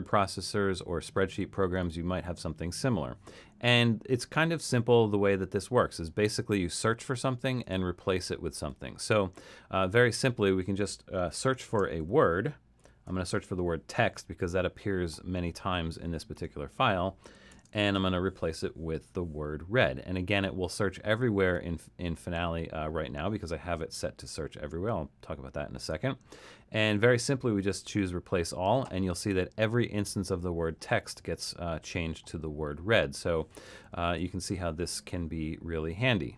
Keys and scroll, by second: 11.7-13.1 typing, 16.4 Tab, 17.3-18.5 typing, 34.3 super+z.